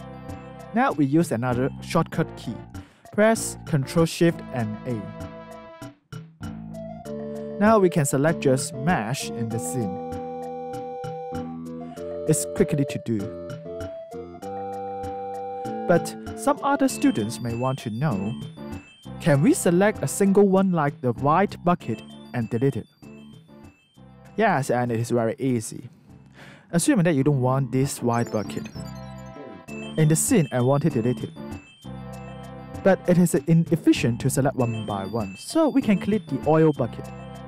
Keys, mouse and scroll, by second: 0.3 alt+right click, 1.4 click, 5.8 ctrl+shift+a, 6.9 alt+click, 8.3 alt+right click, 11.4 alt+click, 13.3 alt+click, 13.4 alt+right click, 14.5 alt+click, 17.7 click, 19.4 alt+click, 24.2 alt+right click, 24.8 alt+click, 25.5 alt+right click, 26.5 alt+middle click, 27.7 click, 28.3 alt+click, 32.3 alt+click, 32.9 shift+click, 34.8 alt+click, 35.3 alt+right click, 37.0 click.